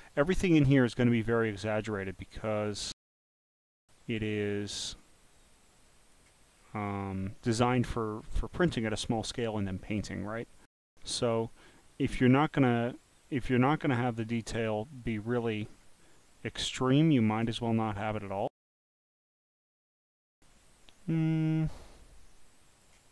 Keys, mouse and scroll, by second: 4.9 click, 5.8 click, 6.8 scroll up 1, 7.2 click, 7.9 scroll up 6, 8.2 scroll, 13.4 click, 14.7 click, 15.3-15.8 scroll down 2, 16.7 click, 18.7 click, 20.7-22.9 drag.